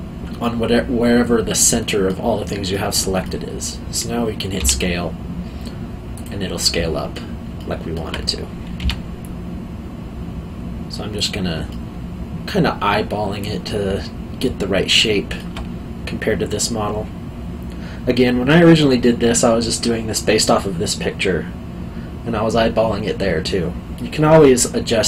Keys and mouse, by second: 2.7 middle click, 4.6 s, 6.1 click, 6.6 middle click, 8.8 s, 11.1 click, 11.7 alt+middle click.